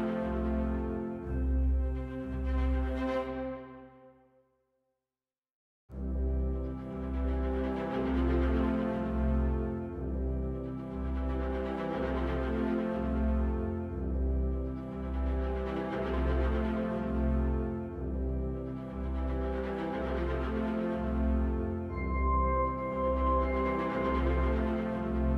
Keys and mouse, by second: 0.4-0.8 shift+drag, 1.4 shift+click, 4.7-11.8 right drag, 15.7 right click, 21.0-23.4 right drag.